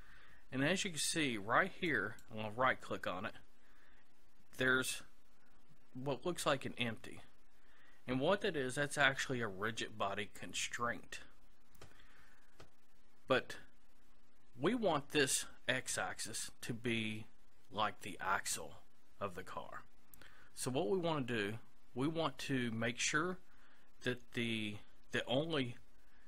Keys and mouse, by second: 1.9-3.7 right drag.